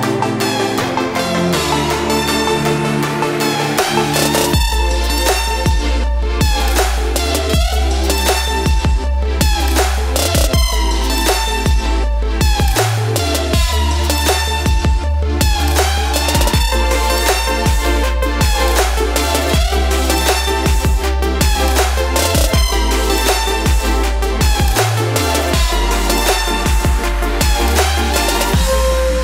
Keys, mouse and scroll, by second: 0.0 Right, 0.1 click, 0.2 Right, 0.4 click, 2.7 Right, 2.8 click, 3.9 space, 4.5 click, 5.7 Up, 5.9 click, 10.1 click, 10.2 Right, 10.4 click, 13.2 click, 13.2 ctrl+space, 13.3 ctrl+click, 15.4 click, 18.2 click, 19.2 space, 19.2 click, 19.6 click, 22.6 space, 22.7 click, 22.7 space, 23.2 click, 26.9 Left, 27.0 click, 27.3 scroll up 1, 28.0 click, 28.2 Right, 28.4 click.